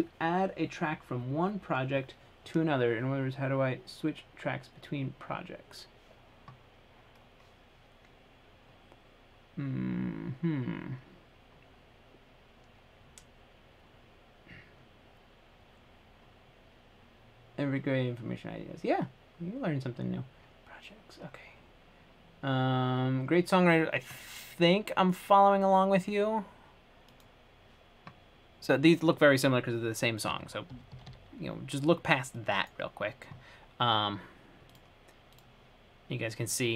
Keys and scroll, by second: 30.9-31.3 typing.